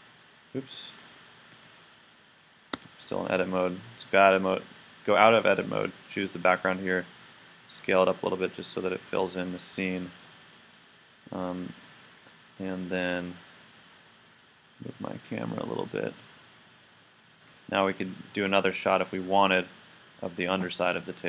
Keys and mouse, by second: 0.9 click, 1.5 z, 2.7 Tab, 6.4 s, 8.9-10.8 drag, 14.0-16.2 middle drag, 21.2 click.